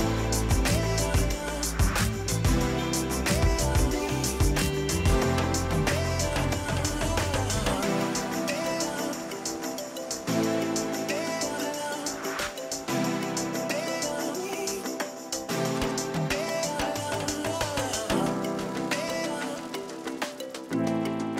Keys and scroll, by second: 0.4 ctrl+g, 9.0 ctrl+c, 9.5 Escape, 11.4 p, 13.5 ,, 14.3 3, 14.7 Return, 17.2 ctrl+g.